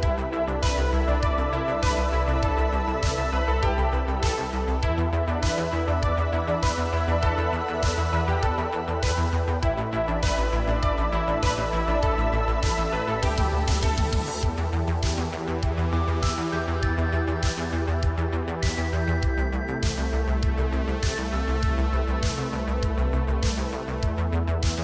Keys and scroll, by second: 0.5 Tab, 1.1 Tab, 1.4 2, 3.6 shift+s, 4.8 Tab, 5.6 Tab, 6.4 shift+s, 7.9 Tab, 9.0 Tab, 9.5 g, 11.0 Tab, 11.4 Tab, 14.1 g, 15.7 g, 20.2 l, 20.7 l, 23.4 l.